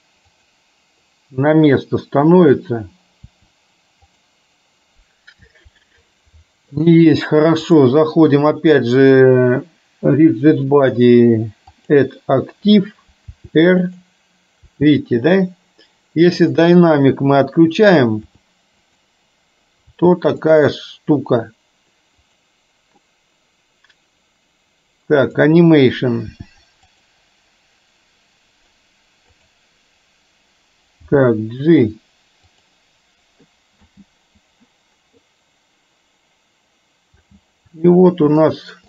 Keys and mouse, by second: 2.6 click, 3.3 r, 7.9-12.1 drag, 13.4 r, 14.7 r, 18.3 r, 20.0 r, 22.3 click, 25.3 click, 26.4 r, 29.4 click, 31.2 g, 33.8 space, 37.2 space, 38.5 shift+middle click.